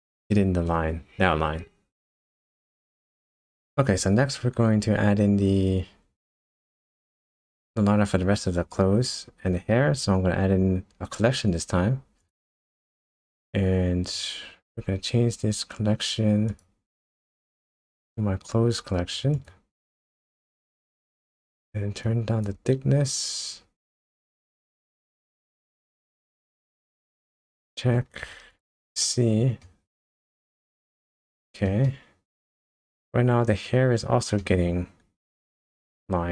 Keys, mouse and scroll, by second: 0.3 middle click, 3.6 click, 3.6-4.8 scroll down 2, 5.0-5.6 scroll down 2, 6.1 shift+a, 13.3-14.1 scroll down 3, 16.5 click, 17.8 click, 22.0 click, 25.1-25.6 scroll up 3, 25.6-26.1 scroll down 2, 27.4 KP_0, 28.5 click, 29.0 shift+middle click, 30.0 shift+middle click, 31.8 shift+middle click, 34.4 shift+middle click.